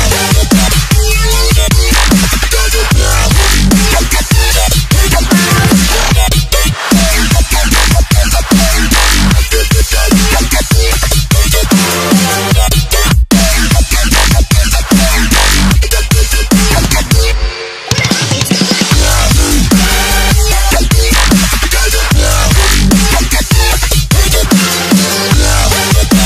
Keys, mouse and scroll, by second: 2.5 alt+scroll up 1, 3.6 alt+scroll up 1, 3.7-7.4 typing, 3.7 click, 4.5 click, 5.9 click, 6.4 KP_Add, 7.1 click, 7.6 click, 8.1 ctrl+s, 9.6 ctrl+shift+s, 11.0 click, 11.4 click, 16.5 ctrl+s, 17.2 s, 17.7 click, 20.6 click, 22.0 c, 23.1 click, 24.2 v, 25.1 click.